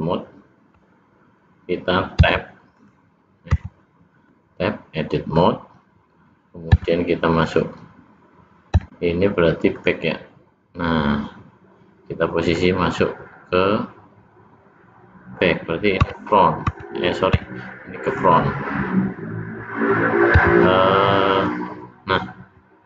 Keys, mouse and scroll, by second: 3.5 Tab, 4.1 middle click, 6.0-6.4 scroll down 1, 8.6 KP_1, 12.4 middle click, 15.9 Tab, 16.6 Tab.